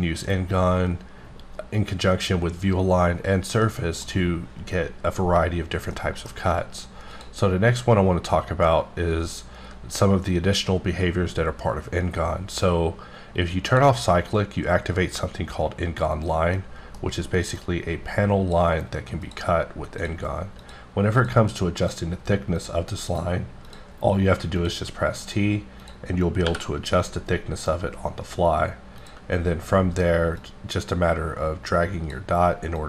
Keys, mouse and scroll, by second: 3.5 middle click, 5.9 middle click, 7.0 click, 13.7 click, 16.4 scroll down 1, 16.5 middle click, 17.0-17.6 scroll up 3, 17.6 click, 19.2 click, 20.0 click, 20.6 click, 21.8 click, 22.4 click, 22.6 click, 23.1 click, 23.7 click, 24.6 click, 25.2 click, 25.8 click, 26.4 t, 29.0 click, 30.7-32.2 drag.